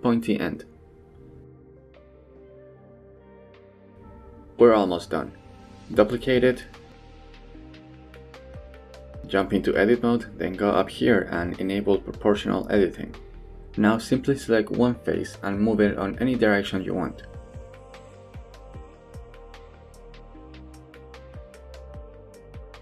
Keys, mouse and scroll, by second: 0.5 middle click, 1.6 z, 2.0 middle click, 2.9 Tab, 3.6-4.1 middle drag, 5.3-6.7 drag, 6.9 shift+d, 8.7 middle click, 9.1 Tab, 9.5 shift+middle click, 9.8 middle click, 10.9 click, 11.8 3, 12.3 click, 12.8 g, 14.4 g, 15.1 middle click, 15.5 shift+middle click, 15.8 click, 15.9 g, 16.8 g, 17.2 shift+middle click, 17.5 click, 17.7 g, 18.4 middle click, 19.3 middle click, 19.7 middle click, 20.0 shift+middle click, 20.1 g, 20.5 middle click, 20.8 shift+middle click, 21.0 middle click, 21.3 click, 21.4 middle click, 21.6 g, 22.2 middle click, 22.5 shift+middle click.